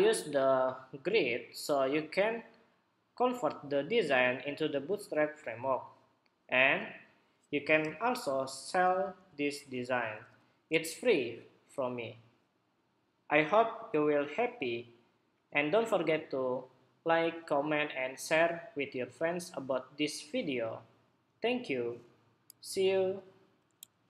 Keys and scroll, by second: 7.5 super+0, 8.1 super+=, 8.4 super+=, 8.8 super+=, 9.1 super+=, 9.9 super+=, 23.9 shift+super+2.